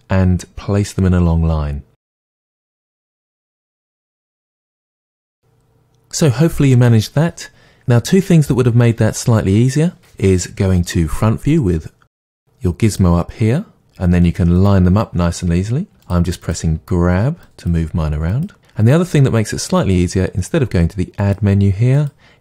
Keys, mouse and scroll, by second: 2.4-4.5 typing, 3.0 click, 3.6 click, 4.2 click, 4.8-12.9 middle drag, 12.9 click, 14.5 click, 15.9 g, 16.4 click, 16.6 g, 17.4 click, 17.6 g, 18.4 click, 21.2 click.